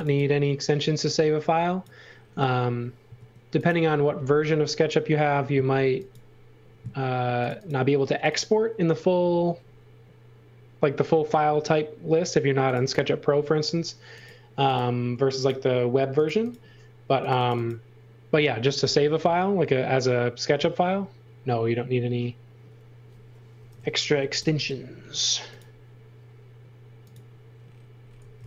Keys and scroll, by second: 0.0-0.5 typing, 3.1 space, 5.8 x, 6.7 space, 18.8 i, 23.5 8, 24.2 s, 24.3 Return, 27.9-28.4 typing.